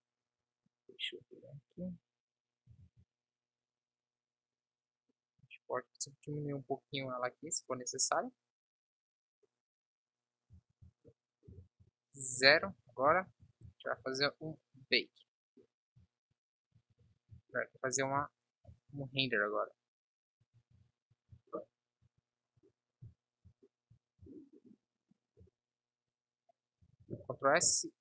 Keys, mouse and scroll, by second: 0.4 KP_1, 3.0 ctrl+s, 5.8 s, 10.8 ctrl+s, 11.7 KP_0, 13.5 shift+f, 18.3 z, 19.1 shift+f, 27.1 ctrl+s.